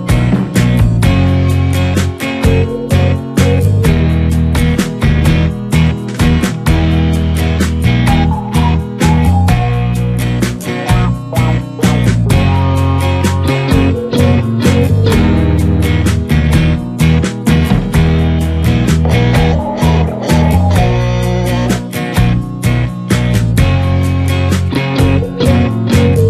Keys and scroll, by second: 3.1 Return, 4.0 ctrl+m, 5.6 Return, 6.0 space, 7.2 shift+F2, 7.6 ctrl+d, 7.8 ctrl+space, 9.4 w, 10.6 Return, 11.8 ctrl+d, 12.2 ctrl+g, 14.3 ctrl+space, 16.6 Return, 20.2 s, 20.4 ctrl+space, 21.2 ], 21.8 space, 25.3 space.